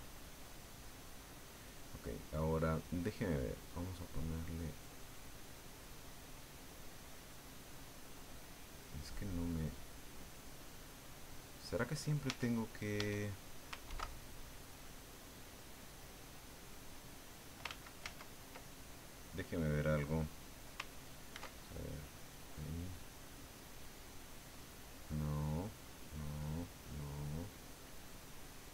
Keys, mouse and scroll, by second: 0.3-1.5 drag, 3.7 click, 6.0 click, 7.7 click, 8.3 click, 9.1-12.1 drag, 12.3 Tab, 13.0 Tab, 13.9 ctrl+2, 14.8-17.6 drag, 17.7 ctrl+z, 19.3 click, 21.3 ctrl+2, 26.7 click, 28.3 click.